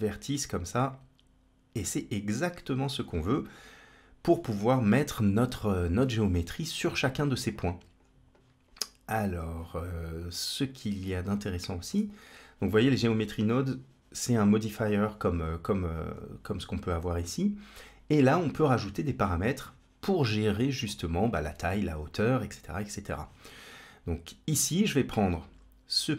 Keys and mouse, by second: 7.4-7.8 drag, 8.2 click, 9.0 click, 10.0 click, 15.7 click, 15.9-16.9 drag, 24.8-26.1 drag.